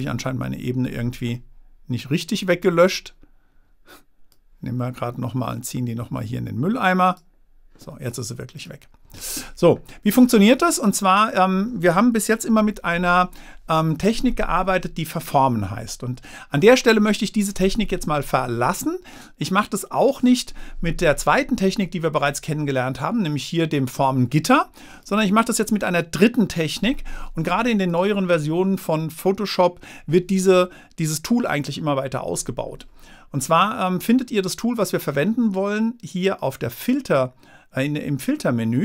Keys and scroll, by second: 12.5 super+-.